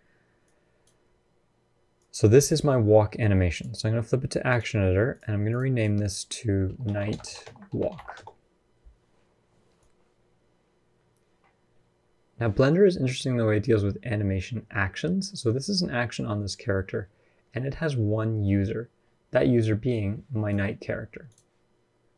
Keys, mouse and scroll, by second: 0.2 click, 1.7 click, 4.9 click, 5.5 click, 9.6 click, 19.2 d, 19.7 click, 20.3 d, 21.0 click, 21.0 d, 22.0 click.